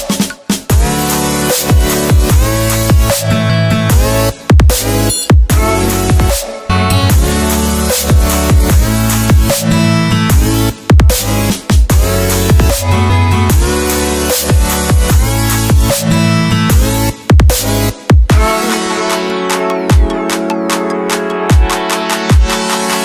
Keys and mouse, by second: 0.6 KP_1, 0.7 KP_5, 1.7 KP_Enter, 10.8 click, 13.1-15.0 drag, 16.8 click, 18.8 space, 19.9 space, 20.9 click.